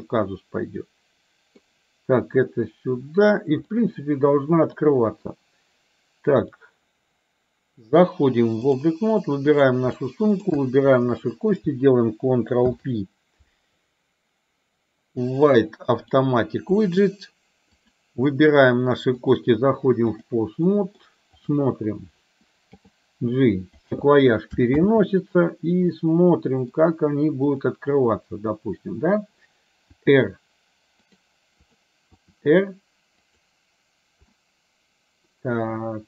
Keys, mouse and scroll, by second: 3.7-4.8 middle drag, 6.5-9.0 drag, 9.8 click, 10.1 middle click, 12.6 ctrl+p, 17.8 click, 19.3-20.4 drag, 20.6 middle click, 22.9 g, 24.9 ctrl+z, 26.0 middle click, 27.5 click, 30.0 r, 32.2 r, 34.4-36.0 middle drag.